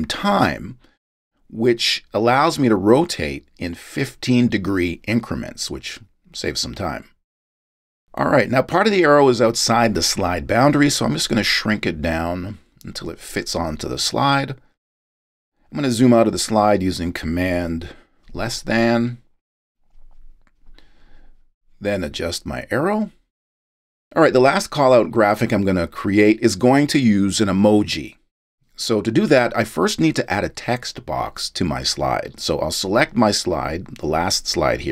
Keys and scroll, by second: 20.0 shift+super+,.